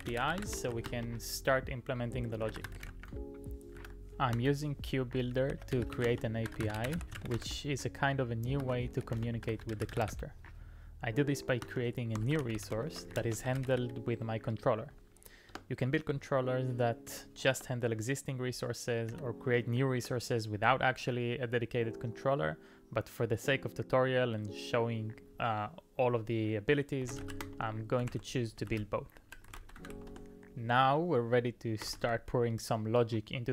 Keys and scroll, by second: 24.3 typing, 26.8-32.5 typing.